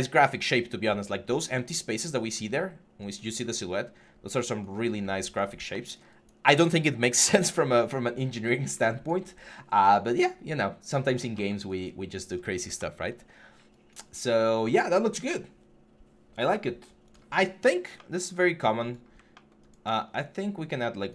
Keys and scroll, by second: 4.6 6.